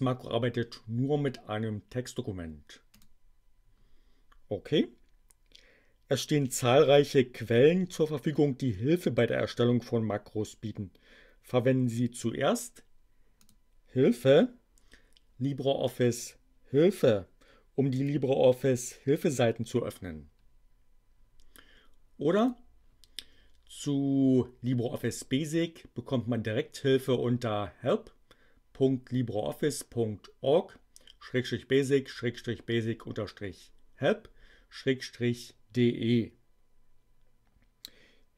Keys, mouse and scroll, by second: 2.9 click, 13.4 click, 17.9 click, 22.3 click.